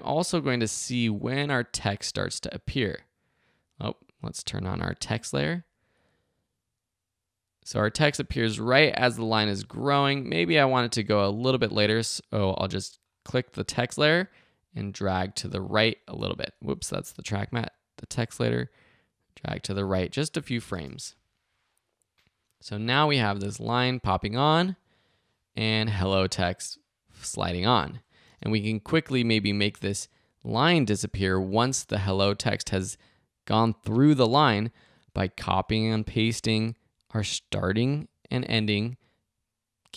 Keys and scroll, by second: 16.6 super+z, 20.7 space, 28.2 space.